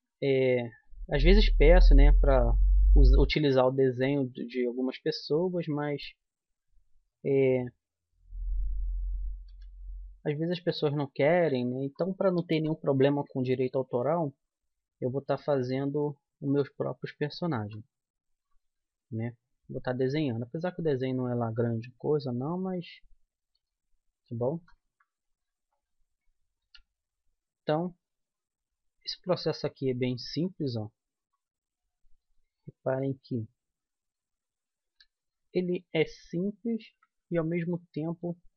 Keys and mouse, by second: 0.7 middle click, 1.4-2.5 right drag, 1.6 e, 5.6-7.5 right drag, 9.4 g, 13.1-15.0 right drag, 14.1 g, 14.9 middle click, 16.4-17.4 right drag, 16.7 g, 17.4-20.1 drag, 18.6 g, 20.6 g, 22.8-24.6 right drag, 23.5 g, 25.3-26.8 drag, 26.6 e, 29.8-31.2 middle drag, 31.2-32.9 right drag, 32.2 g, 35.9-37.5 right drag, 37.5-38.5 middle drag.